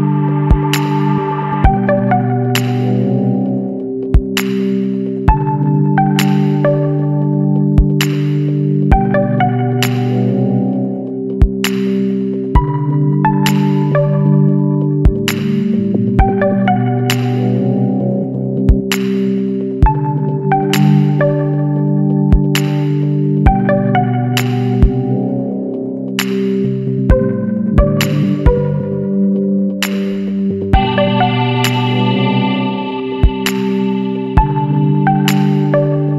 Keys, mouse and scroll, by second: 1.3 scroll up 1, 2.0-3.2 middle drag, 3.2 click, 5.9 click, 6.6 click, 8.0 click, 8.7 click, 9.2 click, 9.8 click, 10.1 click, 11.1-11.7 middle drag, 11.7 scroll down 2, 12.4 scroll up 2, 13.4-14.2 middle drag, 14.2-14.8 scroll up 2, 14.8-16.0 middle drag, 16.0 click, 16.3-17.7 middle drag, 17.7-20.1 drag, 20.1 scroll down 2, 20.4-20.8 middle drag, 20.8 scroll down 2, 21.1-21.6 middle drag, 21.6 scroll down 2, 21.9 middle click, 22.1-22.4 scroll up 2, 22.9-23.3 scroll up 1, 23.3 Tab, 23.6-23.9 middle drag, 23.9-25.7 scroll up 6, 24.3 middle drag, 25.7 a, 26.4 KP_Decimal, 28.4 click, 28.7 scroll down 2, 28.9-30.2 middle drag, 30.2 click, 31.2 ctrl+l, 31.9 Delete, 35.1-35.8 scroll down 10.